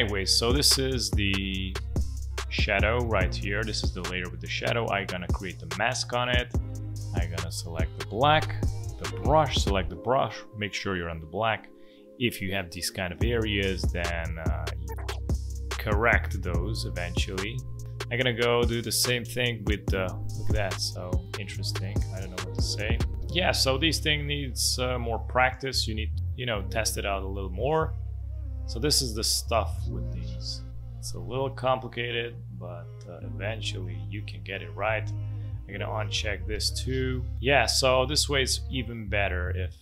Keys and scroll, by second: 8.2 b, 14.5 ctrl+z, 26.4 ctrl+z, 31.0 ctrl+z, 34.7 space.